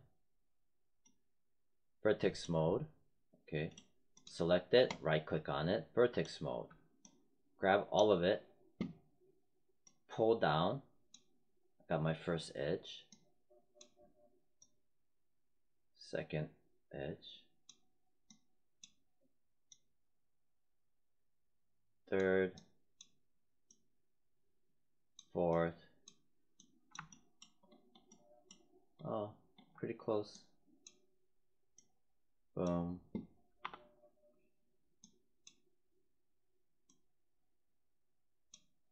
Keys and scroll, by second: 33.5 4.